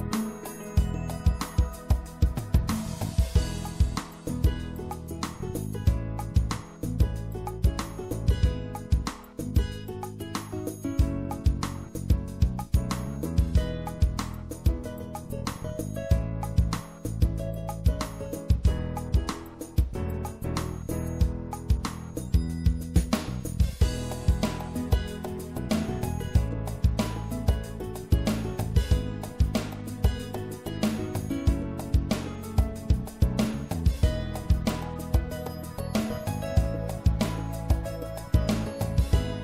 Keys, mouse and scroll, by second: 3.0 ctrl+r, 6.1 click, 6.7-8.0 middle drag, 8.0 ctrl+r, 13.5-16.0 middle drag, 16.0-22.5 right drag, 21.7-23.5 drag, 24.5-27.3 middle drag, 27.3-29.0 drag, 35.4-37.7 middle drag.